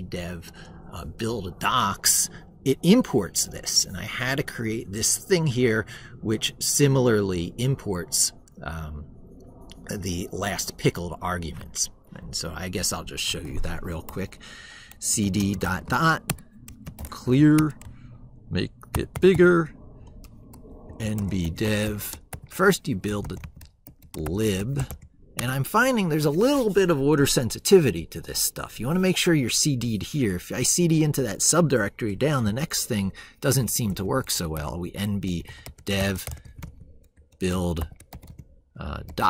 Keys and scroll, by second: 11.9 ctrl+super+Right, 18.9 ctrl+`.